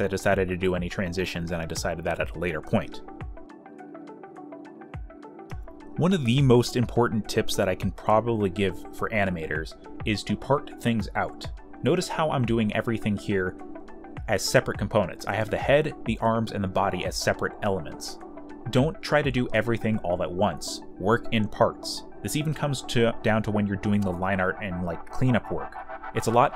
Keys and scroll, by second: 1.1 space, 1.3 z, 1.8 b, 3.1 e, 3.4 space, 6.1 space, 8.4-9.2 typing, 9.4 alt+f, 10.7 z, 11.0 space, 11.6 ctrl+z, 14.1 e, 15.5-18.7 typing, 20.9-22.1 typing.